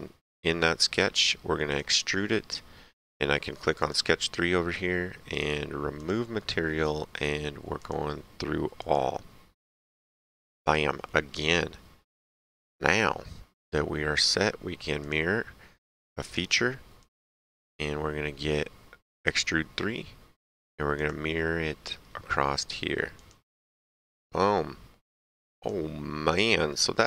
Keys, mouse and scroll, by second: 0.2 click, 0.9 s, 1.7 click, 3.7 click, 5.9 click, 7.7 click, 10.5 click, 11.2 middle click, 13.3 middle click, 15.0 click, 16.2 click, 19.1 click, 20.9 click, 22.2 middle click, 23.1 click, 24.1 right click, 25.5 click, 26.6 right click.